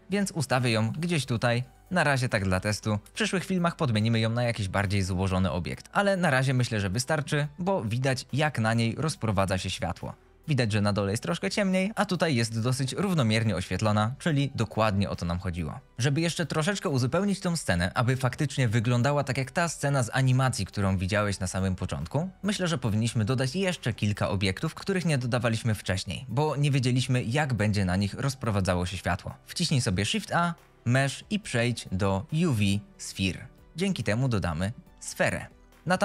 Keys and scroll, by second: 0.0-3.0 typing, 30.0 shift+a, 33.6 g, 33.9 z, 35.8 s.